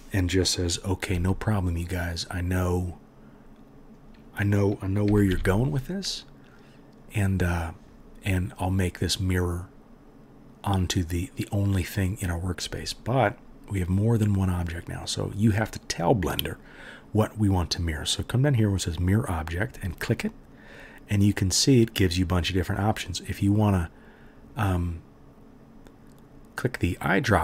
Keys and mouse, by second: 1.2 s, 2.3-27.4 drag, 2.3-4.0 middle drag, 2.3-4.0 right drag, 5.1 g, 19.7-27.4 middle drag, 19.7-27.4 right drag.